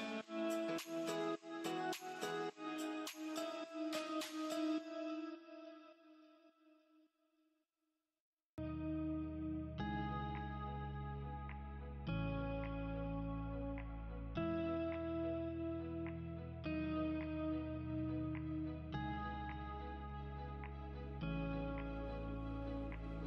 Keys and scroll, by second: 0.3 Escape, 4.8 space, 13.0 space, 16.6 F3, 17.1 F2, 21.3 F3.